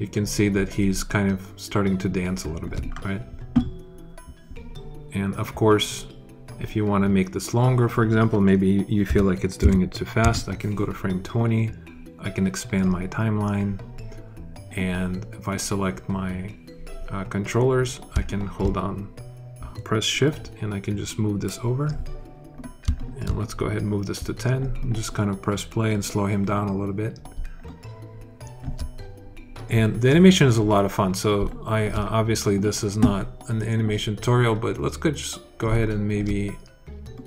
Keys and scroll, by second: 8.9 2, 9.4 0, 10.0 Return.